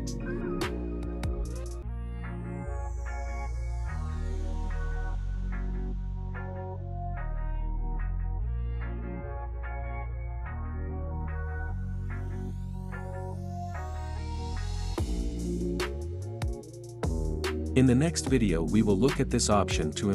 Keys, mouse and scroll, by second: 2.8 click, 3.0 space, 5.1 space, 6.1 click, 7.5 space, 8.9-12.2 drag, 12.2 space, 13.3 space, 14.2-15.7 drag.